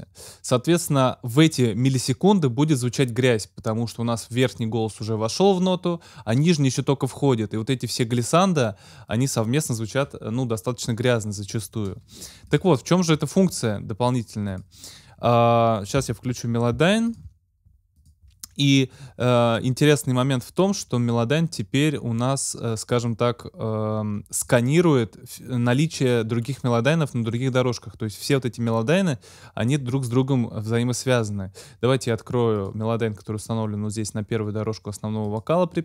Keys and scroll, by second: 15.9 x, 16.7 shift+x.